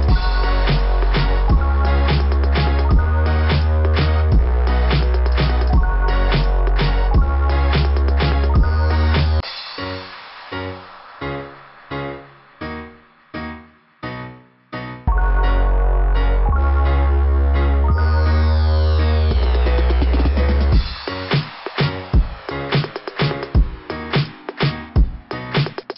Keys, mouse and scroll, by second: 0.3 click, 0.4 click, 1.3 click, 3.9 click, 3.9 scroll down 2, 8.3 click, 8.4 click, 9.8 click, 10.4 click, 11.4 click, 11.5 click, 13.5 click, 15.6 scroll up 2, 16.1 click, 17.9 click, 18.1 click, 18.3 click, 20.7 click, 20.9 click, 21.3 click, 21.4 click, 25.0 click, 25.6 click, 25.7 click.